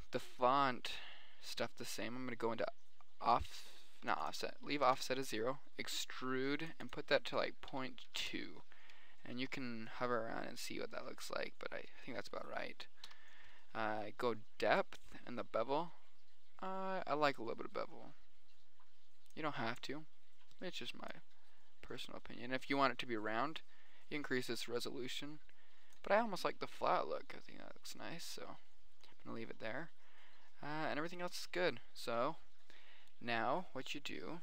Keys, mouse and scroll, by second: 3.7 click, 3.7 middle click, 3.8 click, 4.3-5.5 middle drag, 4.9-9.1 drag, 10.3 middle click, 10.9 middle click, 11.5 middle drag, 12.1 middle click, 12.7 middle click, 13.4 KP_1, 15.3 click, 16.3 click, 17.5 middle click, 18.1-21.1 middle drag, 21.7-23.1 drag, 23.5-24.7 middle drag, 27.7-28.6 middle drag, 28.6-28.9 scroll up 1, 28.9-31.4 middle drag, 34.3-34.4 middle drag.